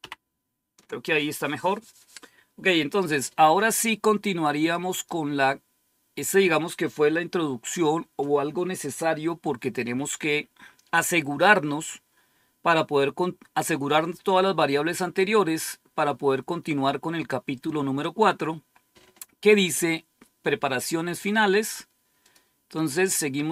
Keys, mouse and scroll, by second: 4.6 click, 5.3 click, 22.1 click.